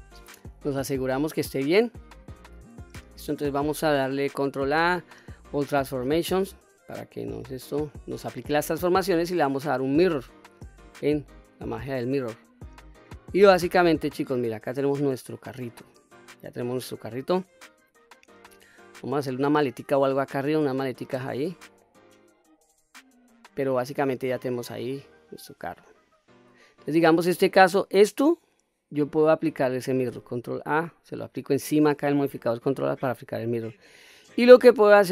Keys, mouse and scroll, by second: 4.4 ctrl+a, 8.2-10.4 drag, 11.1 middle click, 11.5 click, 12.3-12.6 middle drag, 12.9-13.3 scroll down 2, 13.3-15.7 middle drag, 16.0-16.5 scroll up 2, 16.5-18.4 middle drag, 20.2-20.6 middle drag, 21.3-21.6 scroll down 1, 21.6 middle click, 22.6-23.1 scroll up 2, 23.1-24.7 middle drag, 25.1-25.7 scroll down 1, 25.7-26.5 middle drag, 27.0 click, 30.5 ctrl+a, 33.7-34.1 middle drag.